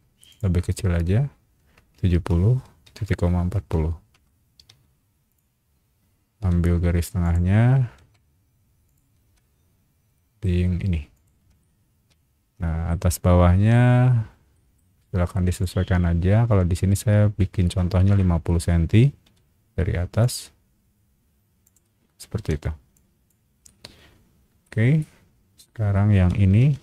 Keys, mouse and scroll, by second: 0.3 click, 1.9-3.5 typing, 4.1 KP_Enter, 4.7 space, 5.3 click, 5.6 scroll up 1, 6.4 m, 7.2 click, 7.9 Escape, 8.8 click, 11.1 shift+click, 11.6-12.9 middle drag, 13.6 t, 14.5 middle click, 15.5 click, 17.4 KP_5, 18.0 KP_0, 18.1 KP_Enter, 19.2 m, 20.2 click, 21.6 click, 22.3 e, 22.9 click, 23.6 middle click, 25.0 middle click, 26.6 ctrl+v.